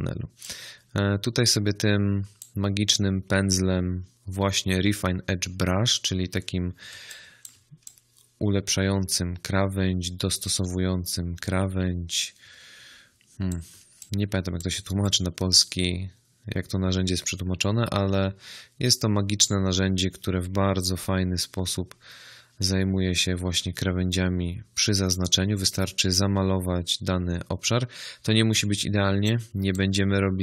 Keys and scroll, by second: 6.8 space, 13.6 space, 28.9 space.